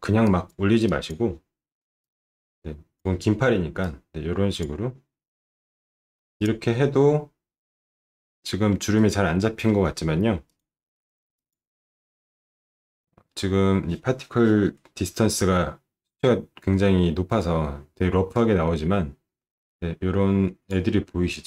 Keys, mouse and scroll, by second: 0.2 click, 0.8 click, 2.0 click, 3.8 click, 5.9 scroll up 1, 6.3 click, 6.7-7.0 scroll up 1, 7.1-8.6 alt+middle drag.